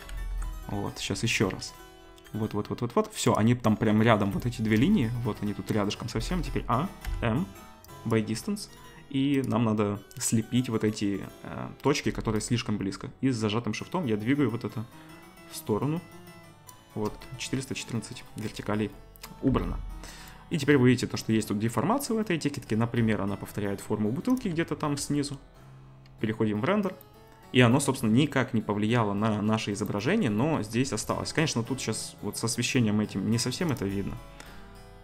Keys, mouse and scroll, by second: 0.1 ctrl+z, 1.0 ctrl+b, 6.1 a, 7.0 m, 9.3-24.4 drag, 19.2 middle click, 19.5 Tab, 22.5-33.7 middle drag, 25.0 z, 30.9 KP_0, 33.7 click, 33.8-35.0 middle drag.